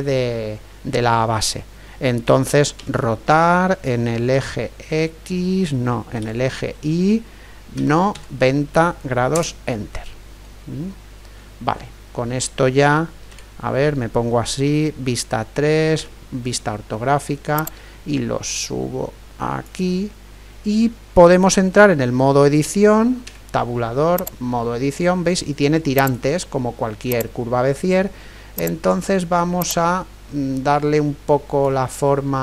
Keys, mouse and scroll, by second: 2.8 r, 10.4-13.3 middle drag, 13.3 KP_3, 16.0 KP_5, 17.6-19.4 drag, 23.3 Tab, 26.0-30.4 right drag, 29.6-31.5 drag.